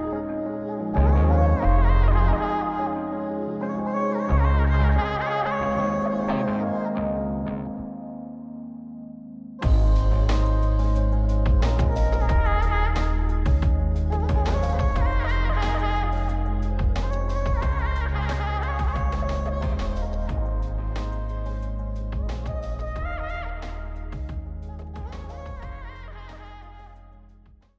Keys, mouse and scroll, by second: 0.1-2.0 drag, 2.9 click, 4.1 click, 4.4 click, 6.4-7.6 drag, 8.1 click, 9.6 click, 10.7-14.1 drag, 14.6 click, 16.1 click, 17.2 click, 18.5 click, 19.7 click, 21.3-27.3 drag.